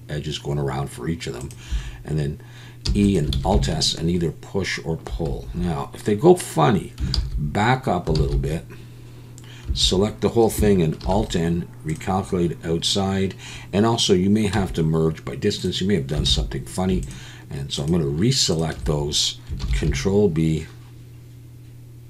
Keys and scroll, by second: 2.8 e, 3.4 alt+s, 5.3 Escape, 5.5 Escape, 7.2 ctrl+z, 8.2 ctrl+z, 9.7 a, 11.0 alt+n, 14.5 m, 16.3 alt+a, 19.6 ctrl+b.